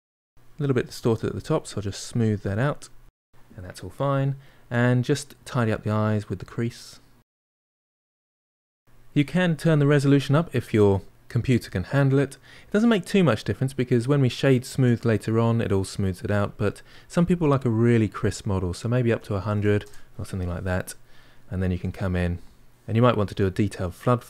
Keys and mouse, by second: 0.2-1.4 shift+drag, 1.6 middle click, 2.0 shift+click, 2.7-5.0 middle drag, 5.0-6.6 drag, 6.6 middle click, 6.8 click, 7.6 middle click, 7.9 click, 9.6-11.1 drag, 19.3 0, 21.2-23.3 ctrl+middle drag, 23.3-24.2 drag.